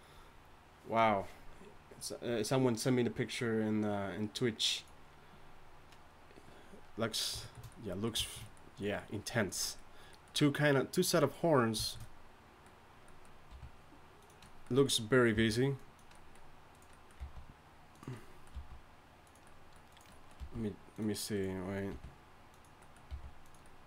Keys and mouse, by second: 13.5 r, 15.3 g, 17.2 g, 18.5 g, 20.4 g, 21.9 r, 22.5 g, 23.1 g, 23.8 g.